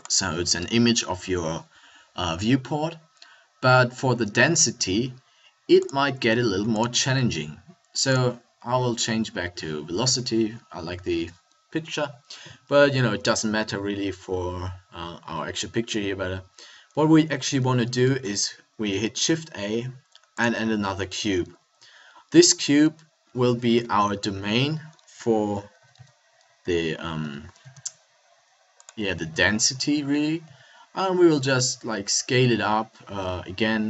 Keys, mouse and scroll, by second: 3.2-5.9 middle drag, 10.1 a, 10.9 a, 13.7 middle click, 17.6 middle click, 18.1 shift+a, 23.7 KP_7, 24.2 KP_5, 25.8 s, 29.0 click, 29.3 KP_1, 30.4 s.